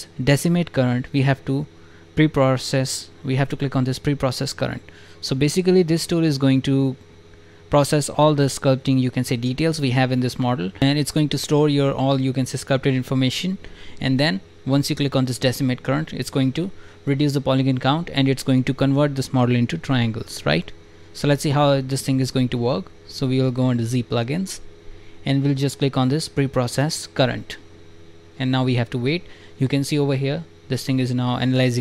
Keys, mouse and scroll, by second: 19.1 click, 20.0 alt+click, 22.8-23.4 scroll up 2, 23.8 click, 25.5 drag.